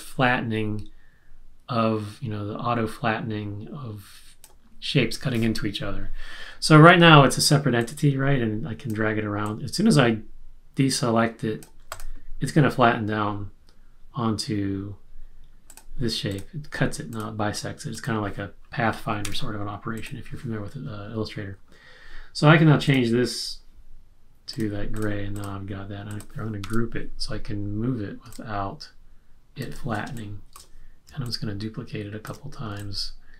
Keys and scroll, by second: 19.2 BackSpace, 26.6 super+g, 30.0 space.